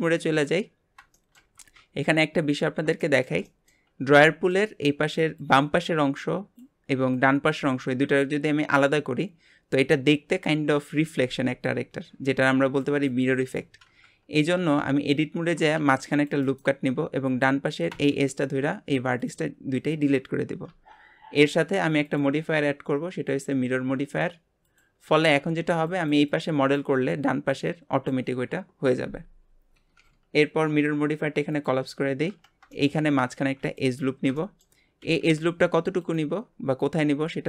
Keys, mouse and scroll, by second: 3.0-14.1 shift+middle drag, 15.7 ctrl+r, 17.2 click, 18.0 x, 20.7 Tab, 22.0-25.1 drag, 31.5 click, 32.3 Tab, 32.7 shift+middle click, 33.4 ctrl+r, 34.4 shift+middle click, 35.0 g.